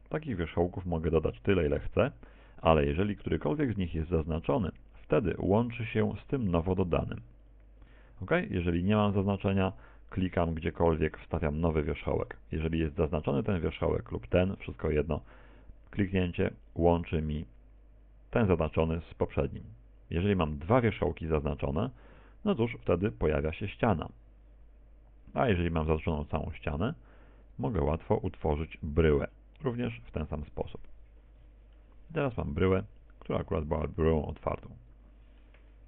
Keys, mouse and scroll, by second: 0.4 ctrl+click, 7.4 ctrl+click, 8.2 a, 10.5 ctrl+click, 14.4 right click, 16.7 ctrl+click, 24.0 ctrl+click, 26.2 right click, 26.8 shift+right click, 27.5 shift+right click, 28.4 shift+right click, 29.6 ctrl+click, 31.3 Tab, 31.8 middle click.